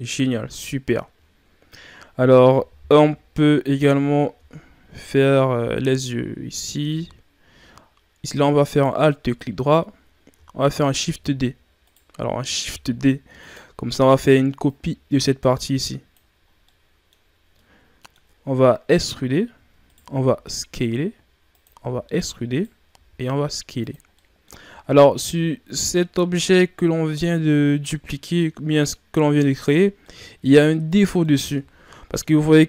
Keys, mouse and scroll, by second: 0.5-1.3 scroll down 2, 1.3-3.0 shift+scroll down 1, 3.0 KP_3, 3.8 scroll up 3, 4.3 Tab, 8.6 alt+right click, 10.9 shift+f, 12.6 shift+d, 14.6-16.4 drag, 16.4 scroll down 1, 16.6-19.0 middle drag, 19.0 e, 24.1 middle click, 24.4 scroll up 1, 24.6 Tab, 25.2-28.3 middle drag, 29.5 Tab, 30.0-31.5 middle drag, 31.5 Tab, 32.1-32.6 middle drag.